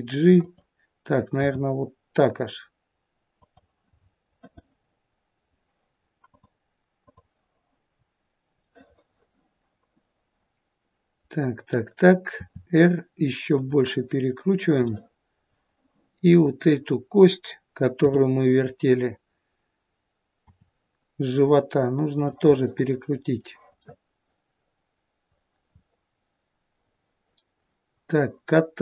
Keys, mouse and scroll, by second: 1.4 r, 4.0-6.4 scroll down 3, 4.3 middle click, 8.6 middle click, 10.1 middle click, 12.4 r, 14.9 middle click, 16.4 click, 20.4 r, 22.5 middle click, 23.8 middle click, 25.8 middle click.